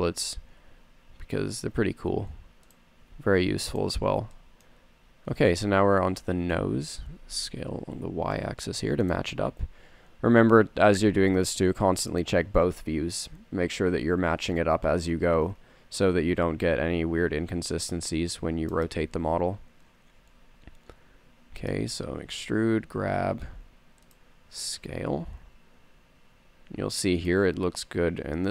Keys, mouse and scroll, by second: 0.8 g, 3.5 s, 4.8-6.0 drag, 6.4 middle click, 7.3 s, 11.3 g, 13.1 a, 15.5 middle click, 17.4 z, 18.0 c, 19.5 z, 20.8 e, 22.6 g, 25.0 s.